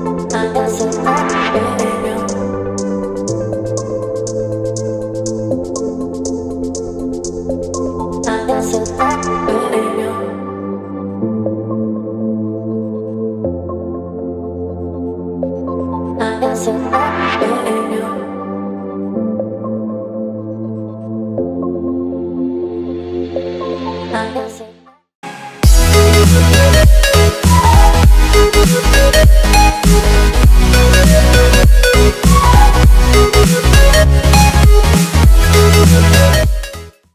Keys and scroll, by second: 4.5 b, 5.1 [, 5.7 [, 5.8 [, 12.1 x, 13.5 v, 15.8 z, 17.5 v.